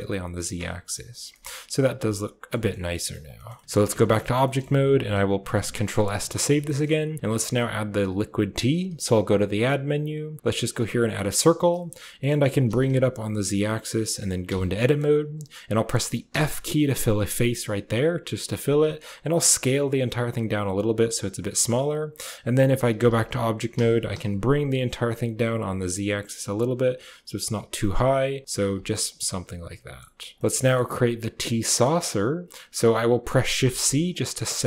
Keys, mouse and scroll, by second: 0.6 Tab, 0.8 click, 1.0 middle click, 1.2 shift+middle drag, 1.9-2.3 drag, 2.5 shift+click, 2.8 click, 3.2 shift+click, 3.4 drag, 3.7 Tab, 4.1 shift+click, 4.3 click, 5.6 ctrl+s, 6.5 click, 8.7 shift+a, 11.6 click, 12.1 click, 12.3 g, 14.3 Tab, 14.7 click, 16.2 f, 17.4 click, 18.7 s, 22.8 Tab, 23.6 g, 28.6 a, 28.8-29.9 middle drag, 30.2 click, 30.4 middle click, 30.5 shift+middle click, 31.6 middle drag, 33.6 shift+c, 34.0 click, 34.4 shift+c.